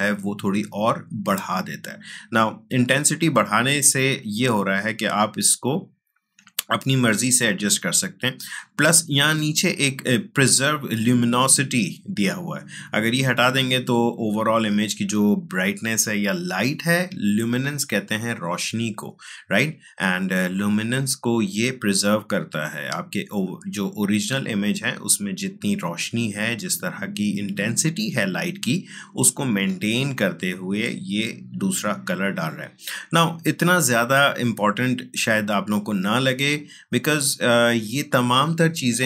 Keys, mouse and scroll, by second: 2.7-11.0 drag, 13.2 click, 15.8 click, 20.4-39.0 drag.